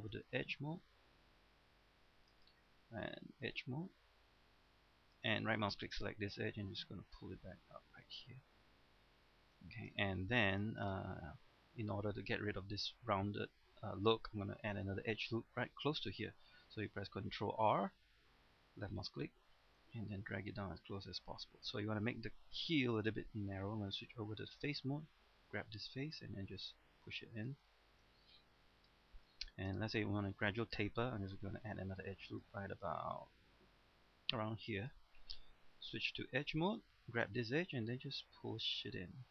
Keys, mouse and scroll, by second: 0.1 ctrl+Tab, 0.4 middle click, 2.3 ctrl+Tab, 2.3 click, 5.1 ctrl+Tab, 5.1 click, 5.7 right click, 6.5-8.4 drag, 8.4-9.1 scroll down 1, 9.1 middle click, 10.0 shift+middle click, 10.4 shift+scroll up 1, 10.7-14.6 shift+middle drag, 17.6 ctrl+r, 19.0 click, 21.2 middle click, 21.8-22.6 scroll up 1, 22.7 shift+middle click, 24.5 ctrl+Tab, 24.5 click, 25.9 right click, 26.3 click, 27.7 shift+middle click, 28.1 scroll down 1, 28.4 middle click, 29.3 scroll up 1, 29.5 shift+middle click, 31.6 ctrl+r, 32.2 click, 36.7 ctrl+Tab, 36.7 click, 37.2 right click, 38.0-39.3 drag.